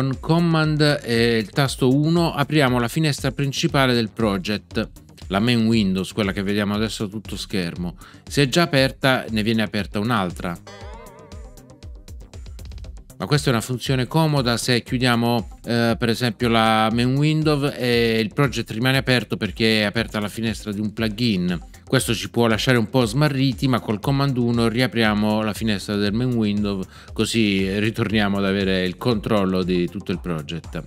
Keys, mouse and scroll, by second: 10.6 super+1.